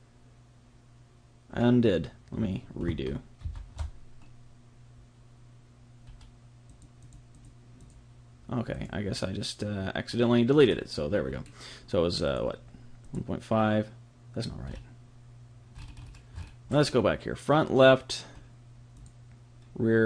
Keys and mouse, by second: 6.0 ctrl+shift+middle click, 6.6-10.5 drag, 11.2-12.2 middle drag, 12.2 click, 14.6-19.0 middle drag, 19.0-20.0 drag.